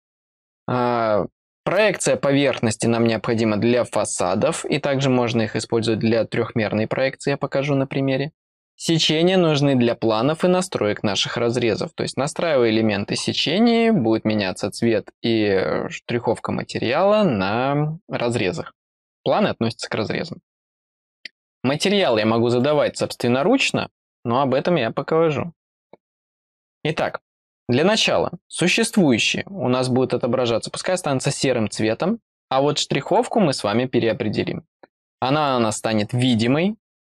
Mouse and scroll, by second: 22.0 click, 22.6 click, 26.1 click.